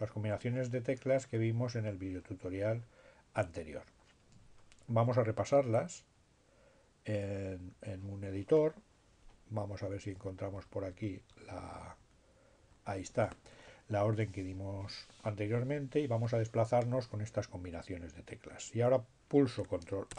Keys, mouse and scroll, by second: 6.8-7.8 drag, 9.5 Up, 12.4 Down, 18.4 ctrl+a.